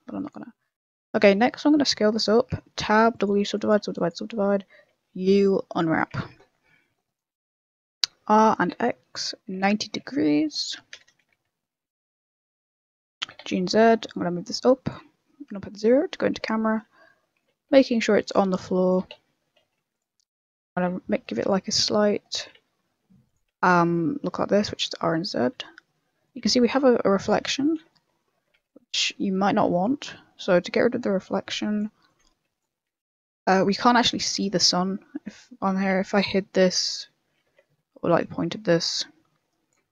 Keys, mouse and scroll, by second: 0.1 click, 0.5 scroll down 2, 0.8 middle click, 1.1 scroll down 5, 1.4 middle click, 1.6 s, 2.5 middle click, 2.7 Tab, 2.8 w, 3.4 w, 3.8 w, 4.9 u, 6.1 Tab, 6.5 middle click, 6.8-7.8 scroll up 3, 7.1 right click, 7.8 r, 8.5 r, 13.2 g, 15.5 KP_0, 16.0 scroll down 2, 16.1 middle click, 16.5 shift+middle click, 16.8-17.1 scroll up 5, 17.1 middle click, 17.7 g, 18.9 g, 20.1 middle click, 20.5 r, 21.3 r, 23.1 r, 23.6 shift+middle click, 24.0 middle click, 24.3 scroll down 4, 24.5 middle click, 24.8-25.2 scroll up 4, 25.2 shift+middle click, 25.5 middle click, 26.5 shift+middle click, 27.9 ctrl+middle click, 28.6 a, 29.0 shift+middle click, 29.7 right click, 31.0 click, 32.0 click, 32.8 n, 34.0 click, 35.2 right click, 36.3 j, 36.8 h, 37.5 ctrl+z, 38.2 click.